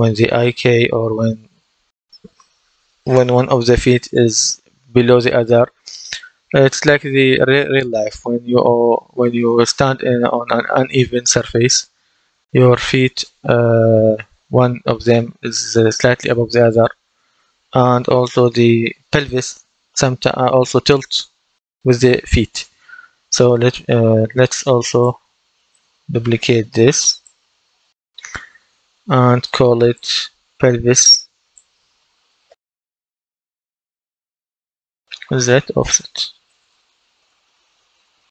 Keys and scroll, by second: 32.1-38.3 typing.